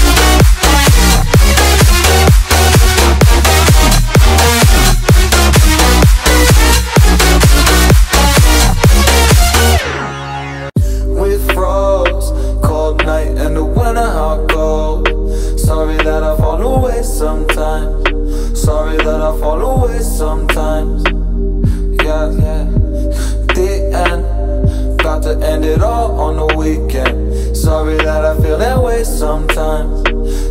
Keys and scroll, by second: 3.1 Return, 3.6 Down, 9.0 space, 12.2 Caps_Lock, 12.2-13.8 typing, 17.5 Return, 19.8-20.9 typing, 28.2-29.6 typing.